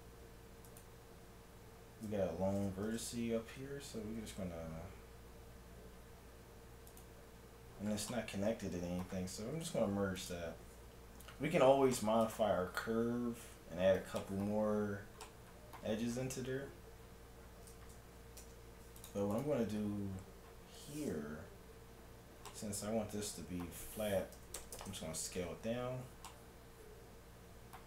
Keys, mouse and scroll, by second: 0.7-2.3 middle drag, 0.7-2.5 right drag, 2.9 shift+Tab, 3.9 g, 7.7-9.7 middle drag, 9.6 g, 11.2 a, 12.0 middle click, 15.7-19.2 middle drag, 18.4 ctrl+Tab, 19.4-21.3 right drag, 20.2-24.1 middle drag, 24.1 s, 26.3 middle click, 27.6 middle click.